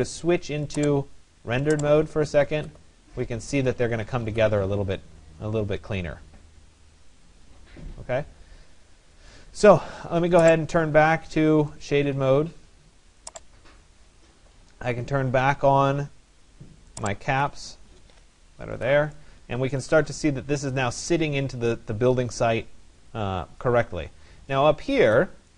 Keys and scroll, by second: 3.5 Escape, 17.9 Escape.